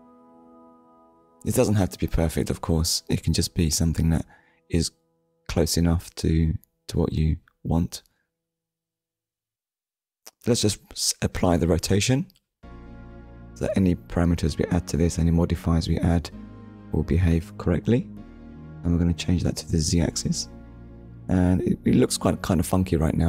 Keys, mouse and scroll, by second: 2.9 ctrl+a, 4.5 click, 7.6 click, 8.0 shift+middle click, 11.8 click, 14.2 click, 15.7 click, 17.9 click, 18.8 click, 23.0 click.